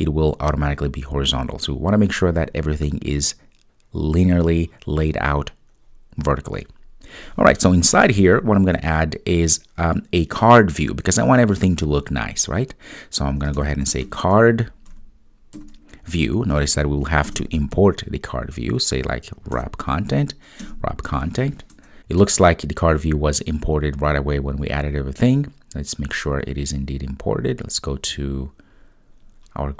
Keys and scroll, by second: 17.4 Return.